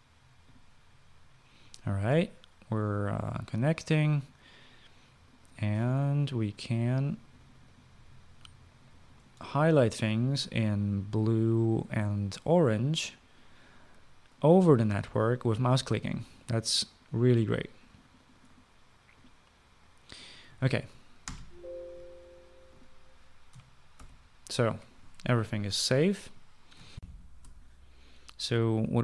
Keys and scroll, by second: 22.1 ctrl+s, 27.9 shift+F9.